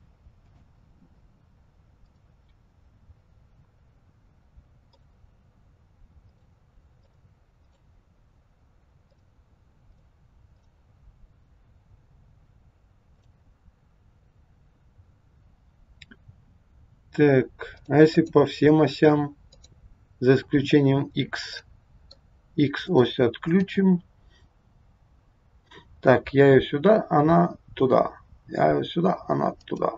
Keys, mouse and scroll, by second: 0.4 click, 2.1 click, 4.9 click, 7.1 click, 9.1 click, 10.6 click, 17.7 click, 18.2 click, 19.5 click, 21.5 middle click, 22.8 click, 23.7 g.